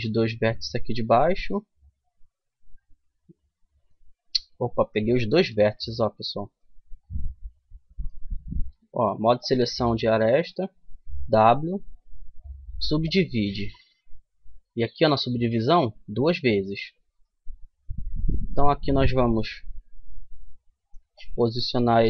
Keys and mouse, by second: 1.4-2.9 middle drag, 4.4 ctrl+z, 4.7 ctrl+z, 6.2 click, 10.8 w, 15.3-16.8 drag, 16.8 middle click, 17.2-18.4 middle drag, 19.0 KP_3, 20.8-22.0 drag.